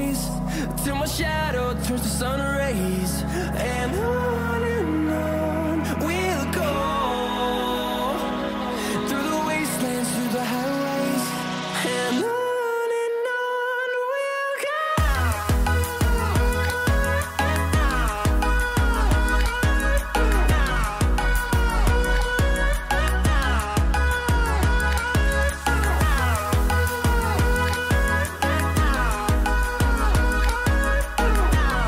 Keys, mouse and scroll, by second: 1.3 scroll down 1, 2.7-25.9 drag, 26.5 scroll down 1, 28.1 click.